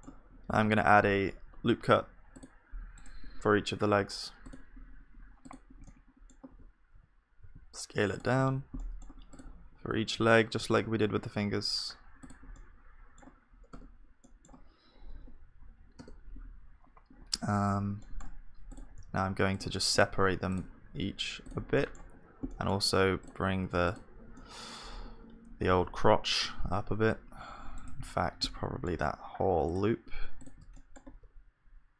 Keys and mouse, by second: 0.5 ctrl+r, 0.5-2.8 middle drag, 5.9-7.5 drag, 5.9 middle click, 5.9-7.5 right drag, 6.5 e, 9.3-11.3 drag, 9.3-11.3 right drag, 9.3 e, 9.8 e, 13.8 Tab, 13.8-17.1 middle drag, 15.1 KP_1, 18.0 middle click, 19.0 click, 19.0 g, 20.0 click, 20.2 g, 21.5 g, 25.0 KP_1, 25.8 g, 28.5-30.8 middle drag, 30.8 click, 31.1 g.